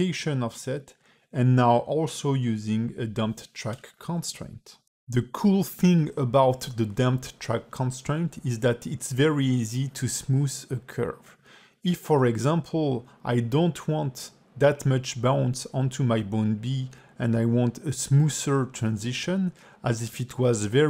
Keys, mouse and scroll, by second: 8.9 click, 10.9 click, 11.8 x, 12.6 click, 12.8 x, 13.4 click, 14.3 x, 15.1 a, 15.6 v, 16.6 a, 16.7 a, 17.0 click, 17.3 g, 18.4 g, 19.5 scroll down 4, 19.8 space.